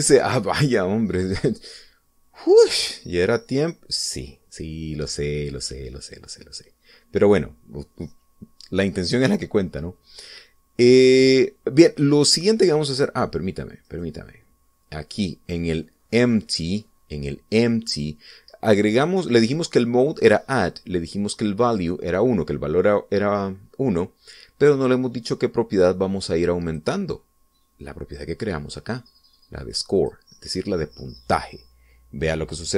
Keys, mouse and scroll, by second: 1.2 right click, 15.0 right click, 27.9 click, 31.1 click.